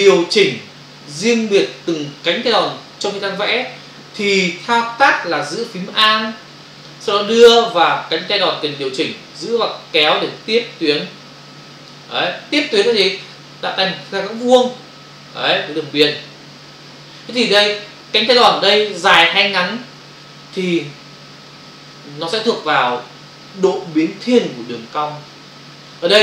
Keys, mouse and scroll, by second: 9.5 alt+click.